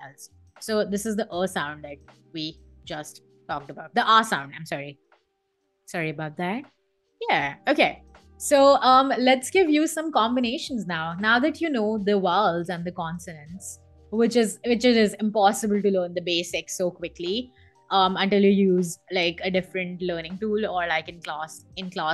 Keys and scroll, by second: 4.7 BackSpace.